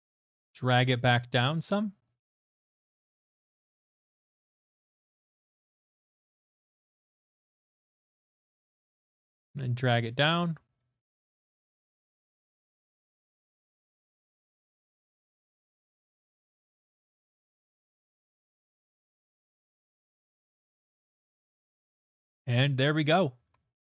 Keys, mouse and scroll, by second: 0.2 click, 1.0 click, 1.8 click, 2.1 click, 2.4 click, 2.6 click, 2.9 click, 4.0 middle click, 4.3 click, 4.5 click, 5.2 middle click, 5.4 middle click, 5.6 click, 5.8 click, 6.3 click, 6.6 click, 6.9 click, 7.1 click, 7.5 click, 7.7 click, 8.0 click, 9.3 click, 9.7 click, 10.0 click, 10.5 click, 10.8 click, 11.8 click, 12.0 click, 12.3 click, 12.6 click, 12.7 click, 12.8 click, 13.0 click, 13.2 click, 13.5 click, 14.6 middle click, 15.3 middle click, 15.7 click, 15.9 click, 16.0 click, 16.2 click, 16.3 click, 16.7 middle click, 17.0 click, 17.2 click, 17.7 middle click, 18.0 click, 18.2 click, 18.5 click, 18.7 click, 18.8 click, 19.0 click, 19.1 middle click, 19.2 middle click, 20.0 middle click, 20.2 middle click, 20.3 middle click, 20.6 middle click, 21.0 middle click, 23.0 middle click, 23.4 click, 23.6 click.